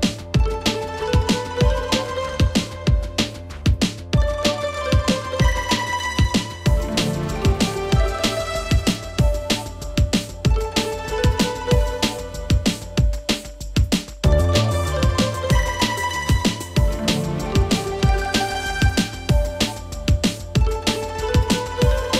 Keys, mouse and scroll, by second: 10.5-22.1 drag.